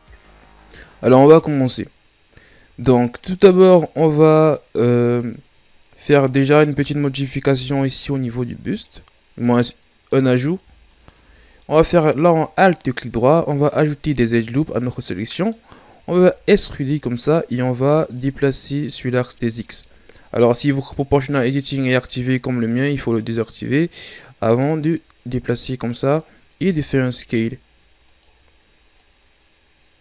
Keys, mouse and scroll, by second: 6.0-7.5 right drag, 7.5 Tab, 8.1 middle click, 9.1-9.7 scroll up 1, 9.7-10.9 middle drag, 10.9 alt+right click, 11.7-14.1 middle drag, 14.1-15.0 ctrl+scroll up 2, 15.0-16.2 middle drag, 16.2 e, 18.2-19.7 drag, 19.7 ctrl+z, 23.0-26.6 drag, 26.6 s, 29.0-30.0 drag.